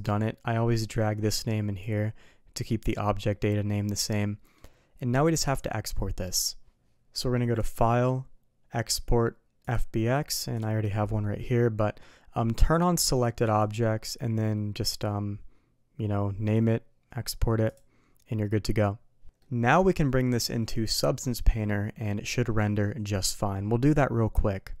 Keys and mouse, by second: 0.9-1.8 drag, 4.1-4.5 middle drag, 7.6-9.8 drag, 19.2 alt+a, 19.4 middle click.